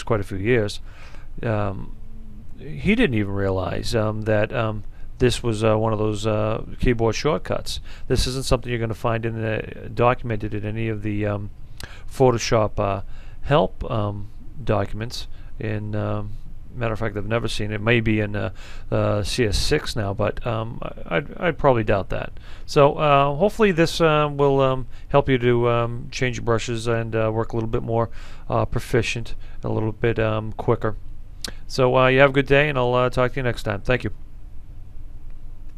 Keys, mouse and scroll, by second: 4.6-13.7 drag, 13.9 alt+right click, 15.5-17.8 drag, 35.7 F10.